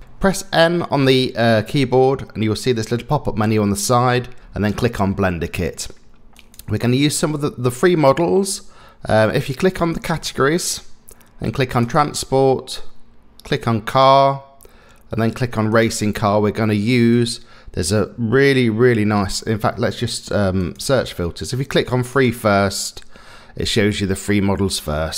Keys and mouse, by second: 0.0 n, 6.3 click, 9.9 click, 11.8 click, 13.9 click, 15.7 click, 20.6 click.